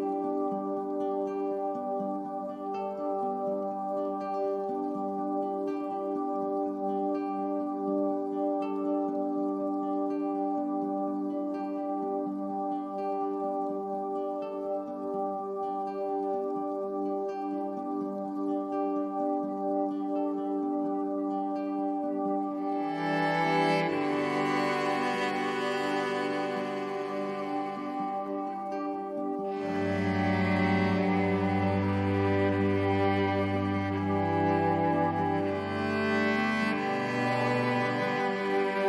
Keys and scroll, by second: 5.7 super+[, 31.3 a, 34.1 super+j.